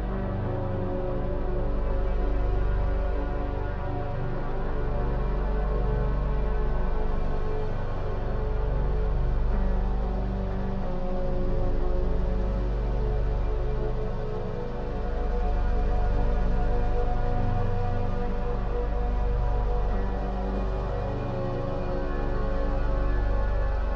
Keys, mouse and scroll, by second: 0.0 scroll down 2, 0.4-2.2 middle drag, 2.2 click, 2.6-3.1 scroll down 3, 3.1 middle click, 3.6-4.3 scroll up 6, 4.3-6.9 shift+middle drag, 6.9-7.3 scroll down 2, 7.3-10.3 middle drag, 10.5 shift+middle click, 11.3-12.0 scroll down 3, 12.0 shift+a, 16.4 g, 22.2-23.9 shift+middle drag.